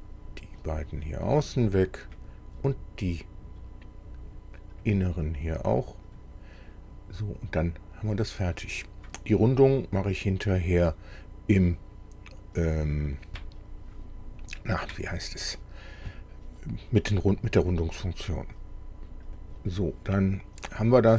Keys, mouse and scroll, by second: 0.7 click, 2.1 click, 4.8 click, 6.1 click, 19.3 click.